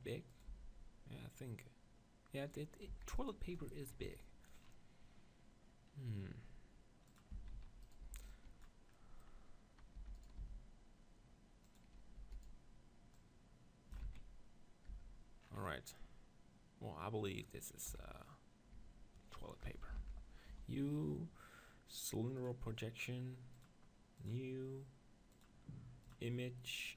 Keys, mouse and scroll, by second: 0.4-2.3 drag, 0.5 g, 2.5-5.9 drag, 2.9 s, 7.1-9.7 drag, 7.4 Tab, 7.6 z, 7.8-9.1 right drag, 8.0 b, 9.7 middle click, 10.0 e, 10.2 click, 10.4 s, 10.8-12.2 right drag, 11.8-13.1 drag, 12.2 e, 12.4 right click, 14.1 z, 14.2 click, 14.9 Tab, 15.5 middle click, 17.9 KP_1, 18.7 Tab, 19.9 ctrl+l, 20.5 u, 24.3-26.9 drag.